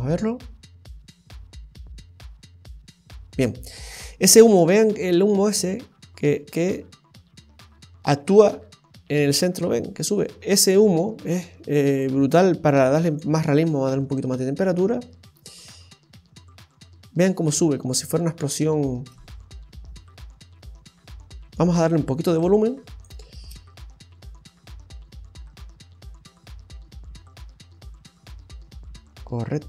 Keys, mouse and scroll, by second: 3.8 space, 7.1 scroll up 1, 10.8 space, 12.0 click, 13.4 space, 14.7-15.1 scroll up 1, 15.1-15.9 scroll down 4, 21.4 space, 22.4 click, 23.3 space.